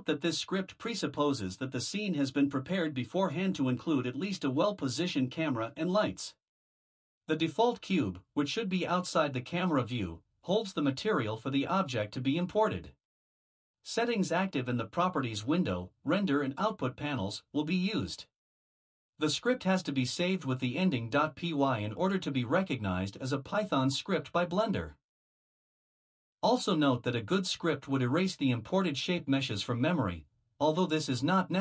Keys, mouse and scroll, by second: 26.0 click, 26.6 Return, 29.2 BackSpace, 30.8 Return.